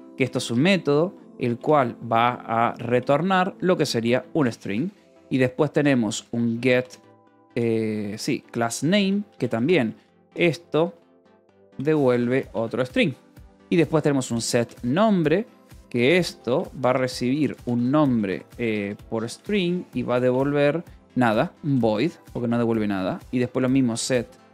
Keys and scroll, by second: 0.0-24.5 typing, 8.2 Return, 13.2 Return.